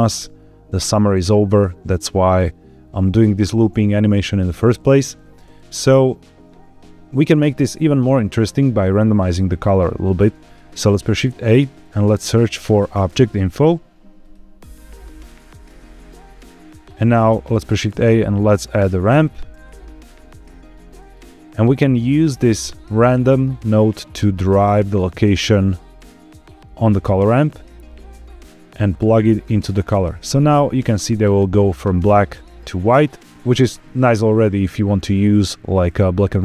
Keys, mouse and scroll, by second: 11.0 shift+a, 17.3 shift+a, 21.0-21.5 scroll up 2, 22.3-26.4 drag, 28.4-29.4 drag, 36.0-36.4 scroll down 2.